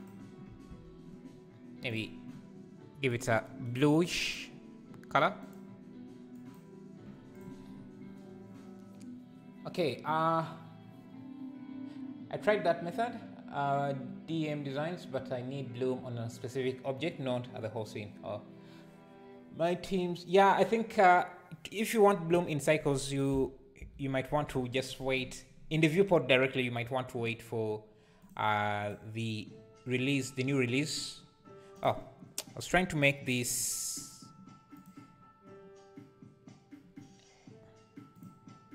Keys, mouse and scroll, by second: 0.1 ctrl+l, 0.7 alt+a, 2.0 click, 3.1-4.3 drag, 6.3 click, 7.4 click, 22.7 click, 28.9 click, 31.8 click, 34.7 click, 38.2-38.7 drag.